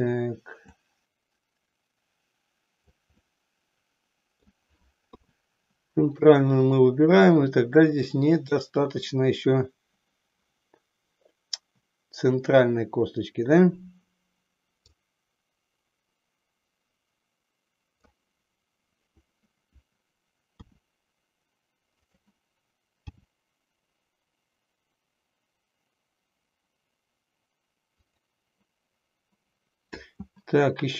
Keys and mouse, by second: 0.7-3.2 drag, 3.3-4.6 middle drag, 5.3 KP_3, 14.8-18.2 drag, 20.5 r, 22.2 click, 23.2 g.